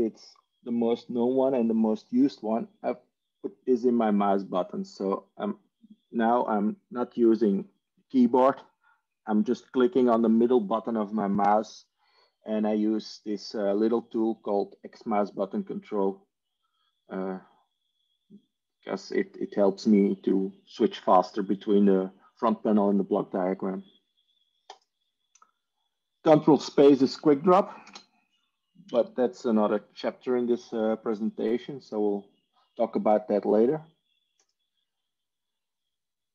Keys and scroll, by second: 5.0 ctrl+e, 5.2 ctrl+e, 7.9 ctrl+e, 28.0 ctrl+space, 28.8 Escape.